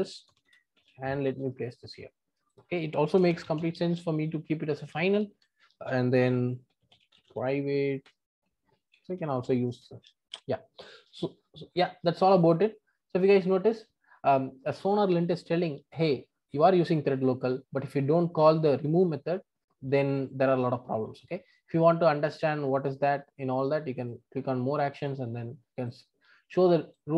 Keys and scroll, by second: 0.8 super+v, 9.8 Return.